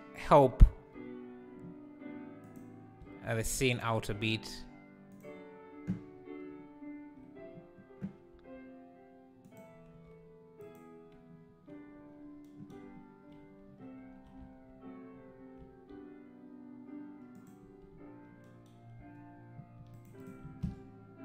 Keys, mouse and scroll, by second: 0.0-0.7 drag, 0.7 g, 8.3 g, 9.9 r, 14.0 f, 15.5 s, 19.8 shift+d, 20.2 shift+right click, 20.4 shift+s.